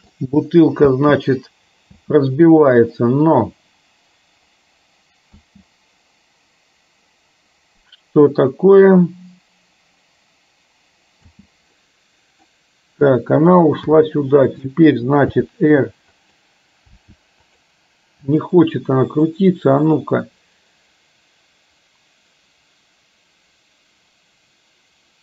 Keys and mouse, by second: 0.9 space, 2.2 space, 5.5 space, 11.2 space, 11.7 middle click, 14.0 g, 15.5 r, 17.2 r, 19.3-25.2 right drag.